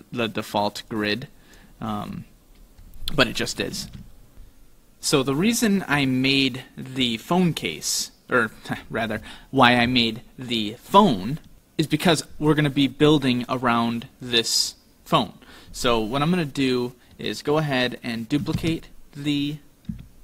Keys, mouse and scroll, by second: 0.9 click, 1.8-2.6 scroll up 1, 2.6 scroll down 2, 2.9 scroll down 3, 3.9 ctrl+z, 6.1 middle click, 7.5-7.9 scroll up 4, 7.9-8.4 scroll down 2, 10.0 scroll down 1, 10.0 middle click, 18.6 shift+d.